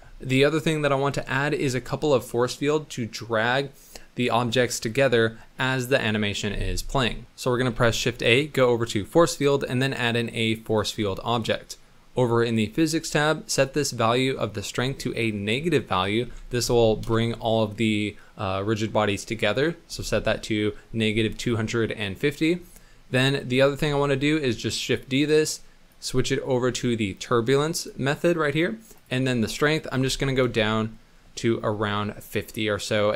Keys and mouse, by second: 7.2 shift+a, 7.7 shift+a, 11.3 click, 13.5-17.1 drag, 22.0 drag, 23.8 shift+d, 25.9-27.8 drag, 28.9-30.4 drag, 32.6 middle click.